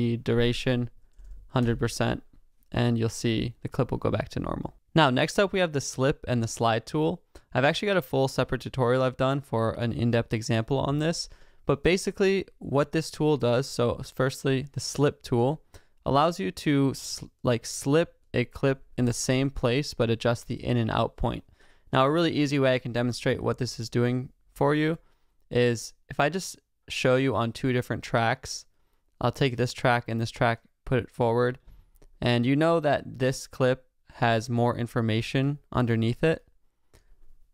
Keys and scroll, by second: 1.6 Home.